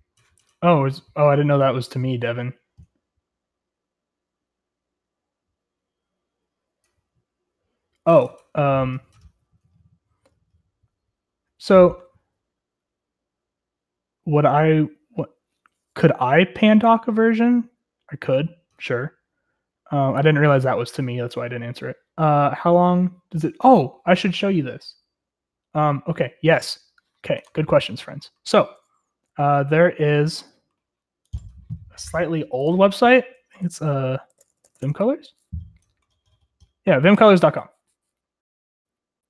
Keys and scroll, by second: 35.4-35.9 typing, 35.9 Return.